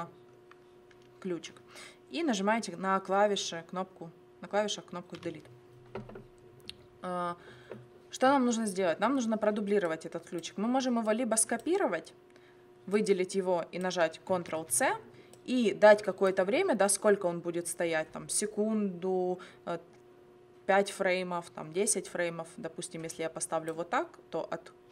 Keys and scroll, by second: 5.2 Delete, 14.5 ctrl+c.